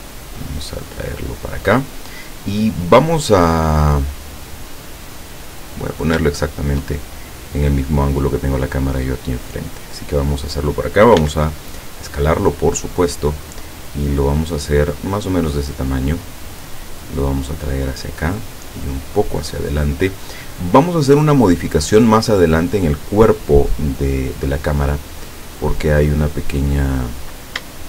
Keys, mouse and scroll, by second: 0.5-2.0 drag, 3.4-5.4 middle drag, 5.8 scroll down 1, 6.4-8.3 shift+middle drag, 9.5-10.8 drag, 11.3 s, 15.3 click, 16.5-18.3 drag, 18.6 middle click, 19.8-22.4 drag, 20.8-22.4 right drag, 25.3-26.3 drag, 27.4-27.7 scroll up 2.